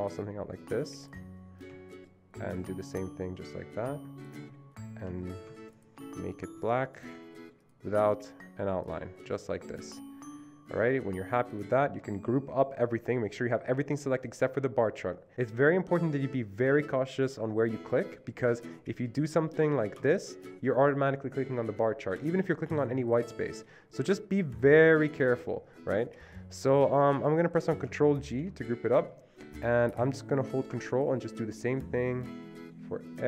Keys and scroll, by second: 5.2 Escape, 28.4 ctrl+g.